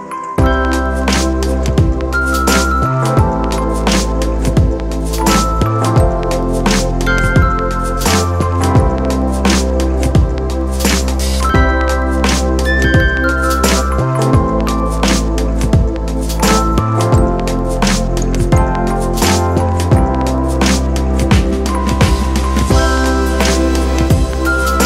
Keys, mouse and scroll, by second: 2.9 ctrl+d, 11.2 ctrl+t, 12.5 alt+shift+click.